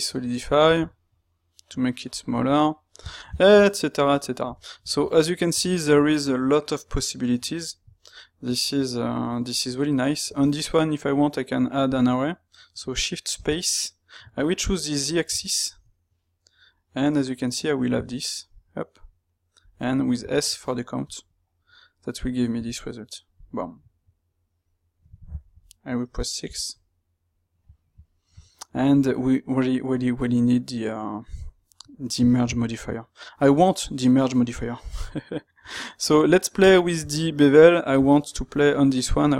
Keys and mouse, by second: 24.5-28.4 middle drag, 28.6 middle drag, 36.5-39.3 middle drag.